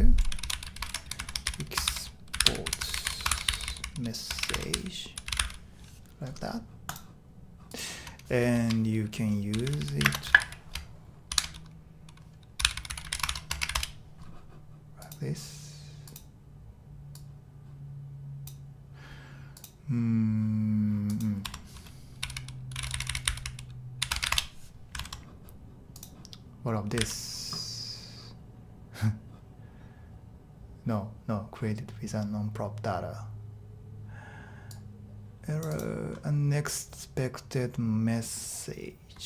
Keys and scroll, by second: 0.0-5.9 typing, 8.5 shift+Tab, 9.3-11.3 typing, 12.3-14.2 typing, 21.4 Tab, 22.0-24.3 typing, 24.3 Return, 27.0 super+r.